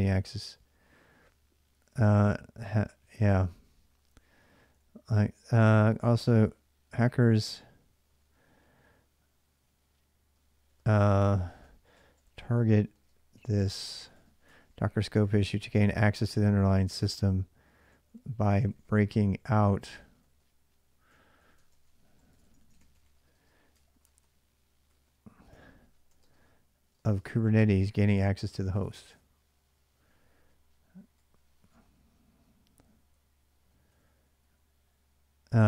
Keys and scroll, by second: 2.0-4.0 h, 4.1 h, 4.3 h, 4.5 h, 6.8-7.9 typing, 10.2-27.7 typing, 31.0-31.4 l, 32.7-34.2 typing, 35.4-35.6 typing.